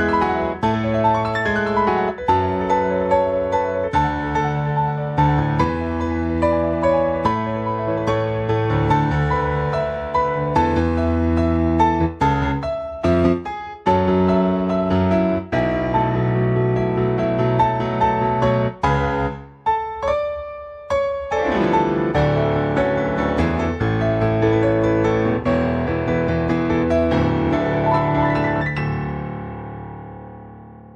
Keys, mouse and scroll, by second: 1.1 click, 7.1-7.6 scroll down 2, 7.8 shift+middle click, 9.2-9.6 scroll down 1, 9.7 shift+middle click, 10.2 scroll down 2, 10.6 shift+middle click, 13.4-13.9 scroll up 1, 13.9 middle click, 15.0 scroll up 1, 15.3 middle click, 15.6-15.9 scroll up 2, 15.9 middle click, 16.5-17.7 scroll up 1, 18.1 middle click, 20.8 click, 21.3 middle click, 21.8 click, 23.4 click, 27.9-28.3 scroll up 3, 28.5 shift+middle click, 29.0-29.5 scroll up 2, 29.5 Tab, 30.2 a.